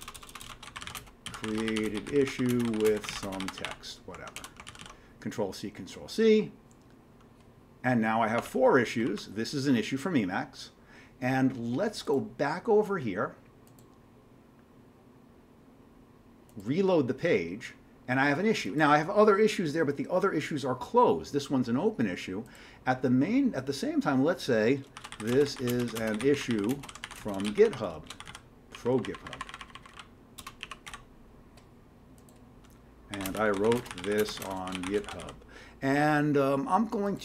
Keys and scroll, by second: 0.0-5.3 typing, 8.4 Tab, 24.8-31.3 typing, 32.9-35.7 typing.